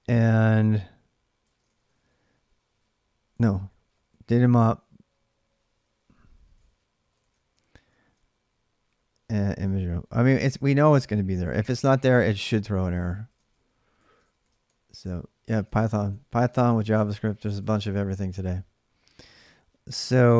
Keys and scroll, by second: 1.0-4.2 typing, 5.9-8.1 typing, 9.2-18.1 typing, 10.9 ctrl+[, 15.3 ctrl+[.